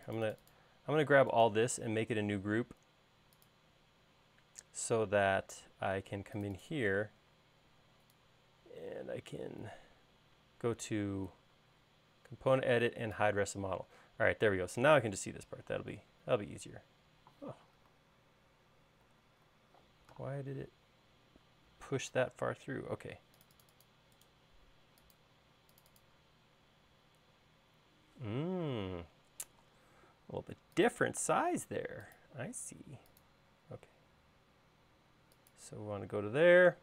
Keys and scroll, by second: 0.0 space, 19.4 super+z, 22.9 super+z, 30.0 l, 32.8 l.